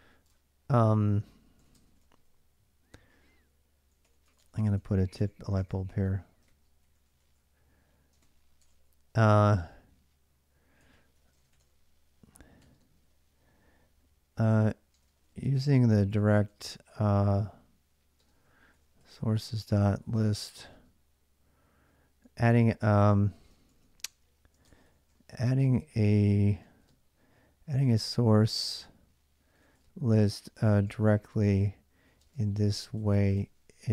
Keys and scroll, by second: 1.4-2.7 typing, 3.8-13.1 typing, 4.0 Return, 4.1 Return, 8.4 Return, 14.5-16.9 typing, 18.0-20.6 typing, 21.8-33.9 typing.